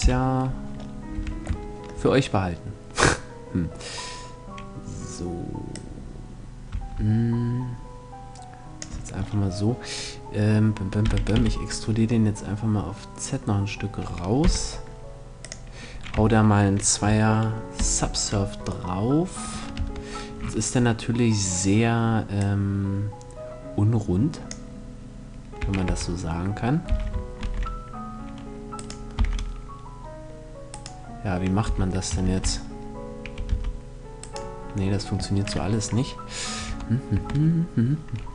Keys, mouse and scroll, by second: 0.6 a, 1.3-3.2 middle drag, 5.2-7.0 drag, 8.7 middle click, 10.6 e, 15.0-16.8 drag, 15.7 Tab, 17.3 ctrl+2, 18.4 middle click, 19.3 Tab, 19.6-21.7 middle drag, 21.9-23.6 drag, 25.1 a, 25.4 a, 26.4 s, 28.4-30.2 right drag, 28.7 s, 30.4-32.2 right drag, 31.2 s, 33.8-35.5 right drag, 36.2 Tab, 36.7 Tab.